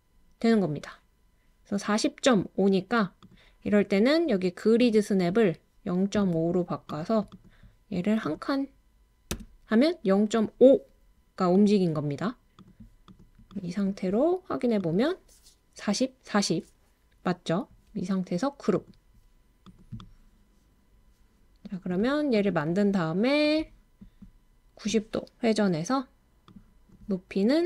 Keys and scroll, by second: 21.5-22.3 typing.